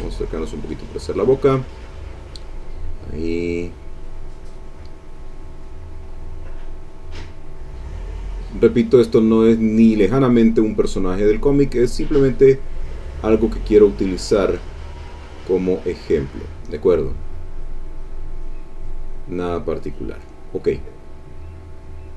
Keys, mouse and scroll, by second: 0.1 ctrl+click, 1.1-3.2 drag, 3.3-4.7 drag, 4.8-6.9 drag, 7.0-8.7 drag, 9.1 click, 10.1 click, 11.0-13.3 drag, 14.6 click, 17.5 click, 17.9 click, 18.3 click, 18.7-20.3 drag, 21.0-22.1 drag.